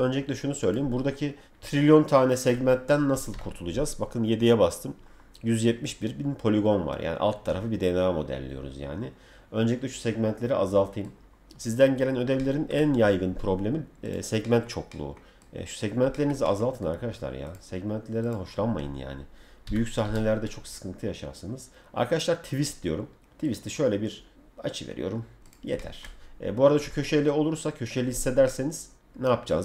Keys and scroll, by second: 3.3 7, 11.0 7, 13.0 F3, 19.6 t, 26.2 F4.